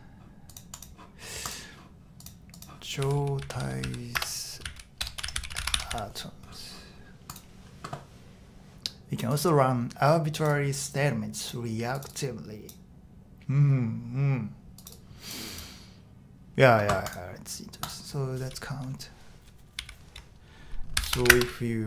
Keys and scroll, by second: 2.7-6.4 typing, 19.8 o, 20.9 shift+4, 21.3 space.